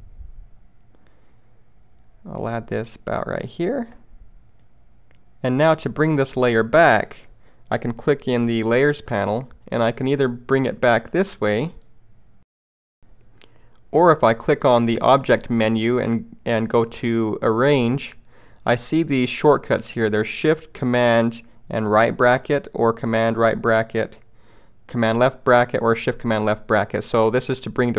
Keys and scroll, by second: 13.0 super+z.